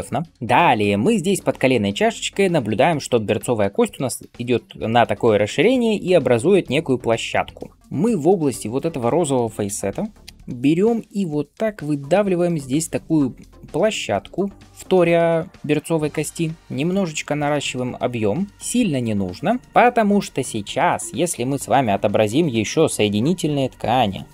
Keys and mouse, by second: 9.6 h, 10.2 h.